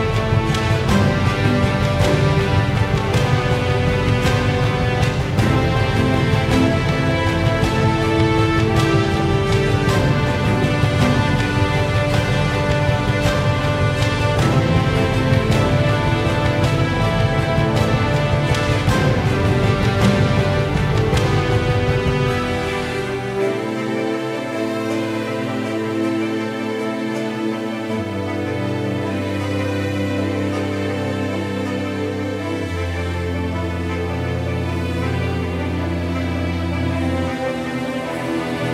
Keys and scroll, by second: 6.1 ctrl+0, 8.7 ctrl+j, 18.9 ctrl+t, 25.3 ctrl+z, 27.5 ctrl+r, 28.6 ctrl+r, 29.7 ctrl+t.